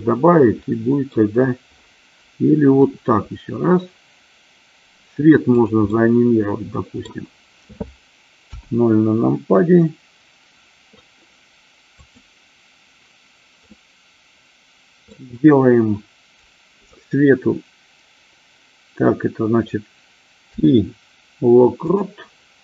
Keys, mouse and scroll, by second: 1.0 middle click, 3.1 r, 5.7 click, 6.1-7.3 middle drag, 8.6 KP_0, 12.4 click, 13.9-15.3 middle drag, 20.7 i.